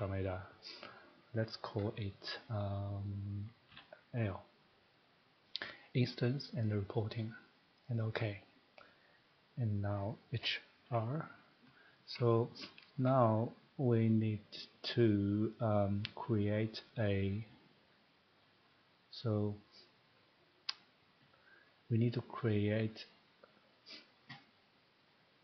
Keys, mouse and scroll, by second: 3.7 l, 6.0 click, 6.8 click, 8.0 click, 9.9 middle click, 10.4-10.8 typing, 11.9 scroll, 12.7 middle click, 13.2 scroll, 14.0 scroll, 15.5 scroll down 1, 15.7 scroll down 1, 16.9 click, 19.1 click, 25.0 click.